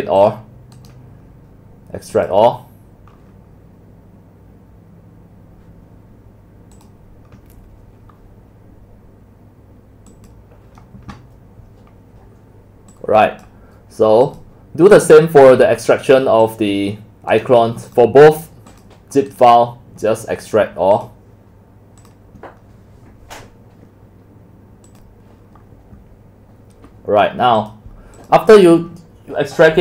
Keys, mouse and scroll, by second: 0.2 click, 0.7 right click, 2.1 click, 6.7 click, 8.2 click, 10.1 click, 12.9 click, 14.2 click, 16.4 click, 17.3 click, 17.8 click, 18.7 click, 19.3 click, 19.4 right click, 20.9 click, 22.0 click, 24.8 click, 28.2 click.